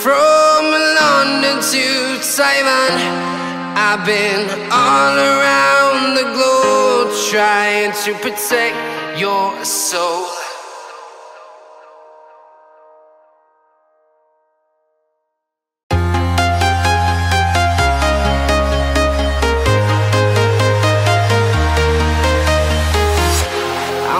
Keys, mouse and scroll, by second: 0.0 right click, 18.6 right click.